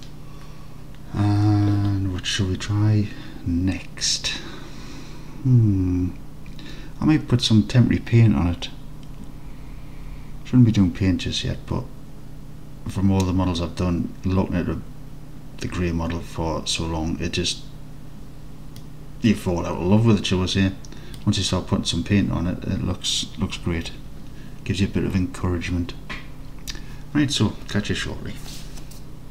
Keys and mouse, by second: 18.9-21.2 middle drag.